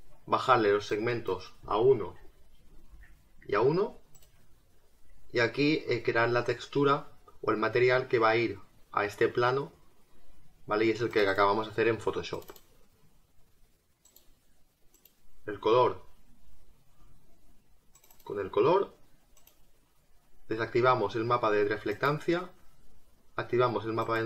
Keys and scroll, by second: 2.2 1, 2.7 Tab.